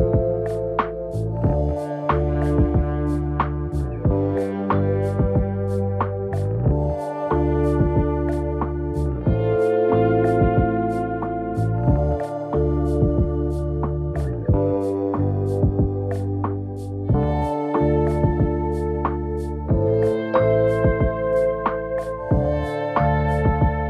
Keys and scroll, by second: 15.8 ctrl+KP_Subtract.